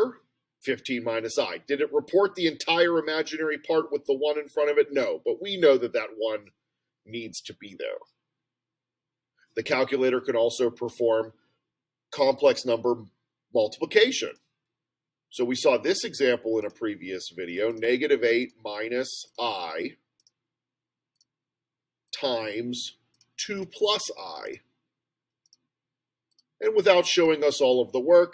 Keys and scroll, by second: 1.9 Return, 16.7 (, 17.7 8, 18.5 -, 20.2 ., 21.2 ), 22.1 (, 23.2 2, 25.5 ., 26.4 ), 27.3 Return.